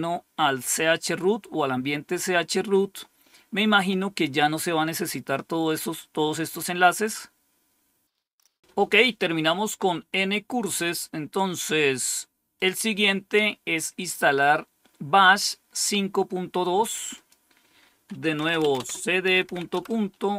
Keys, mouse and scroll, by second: 12.5 click, 17.1 click, 18.1-19.7 typing.